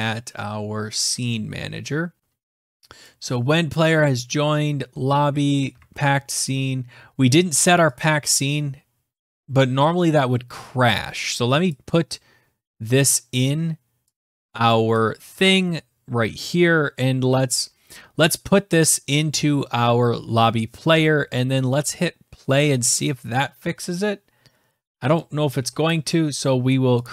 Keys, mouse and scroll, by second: 2.1 scroll, 3.6 click, 4.2-5.1 scroll, 5.6 alt+Tab, 7.8 click, 11.5 click, 13.4-14.1 scroll, 14.7 scroll, 14.8 click, 22.6 click, 25.7 click, 26.9 click.